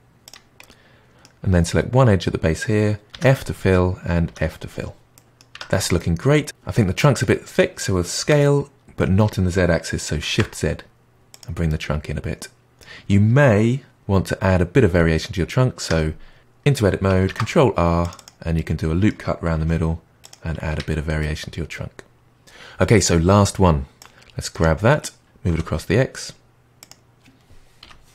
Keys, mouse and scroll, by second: 0.5-3.1 middle drag, 3.1 f, 3.3-4.2 middle drag, 4.2 f, 5.1 middle click, 5.5 Tab, 5.9-7.3 middle drag, 8.3 s, 11.6-14.1 middle drag, 15.8 Tab, 17.2 ctrl+r, 18.5-19.5 middle drag, 19.5 g, 20.6 Tab, 21.2-23.2 middle drag, 23.9 drag, 25.2 g, 27.8 KP_1.